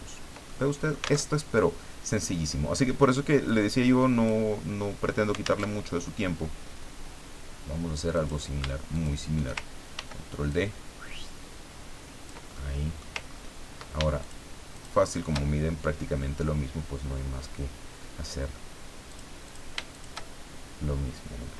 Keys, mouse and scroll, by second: 0.5 ctrl+middle click, 1.0 alt+click, 1.3 alt+Tab, 3.5 click, 5.6 alt+Tab, 8.1 click, 8.9 shift+click, 9.9 ctrl+d, 10.5-12.4 ctrl+drag, 12.5 ctrl+click, 13.3-13.6 ctrl+scroll up 2, 14.2 ctrl+shift+click, 14.7 shift+click, 19.1 click, 19.4 click, 19.9 shift+click.